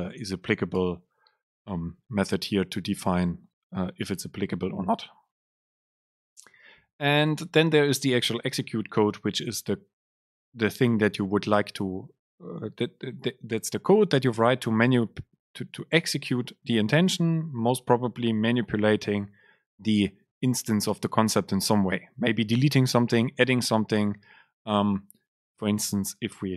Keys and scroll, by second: 0.9 Return, 6.2 BackSpace, 7.3 Down.